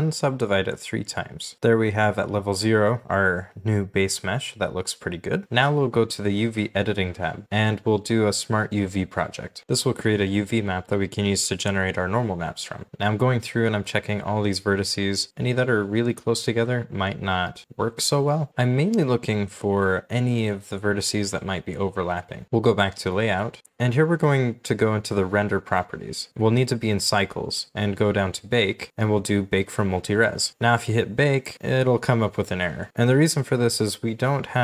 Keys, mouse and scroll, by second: 3.6 scroll down 1, 3.7 g, 8.2 u, 15.3 scroll up 1, 15.5 shift+scroll down 1, 15.6 shift+middle click, 17.2 shift+middle click, 18.0 scroll down 1, 18.5 shift+middle click, 19.9 shift+middle click, 21.2 scroll down 1, 21.6-22.0 scroll up 1, 22.3 shift+middle click, 22.4-23.2 scroll up 1, 25.3-26.0 scroll up 1, 28.5 scroll down 1.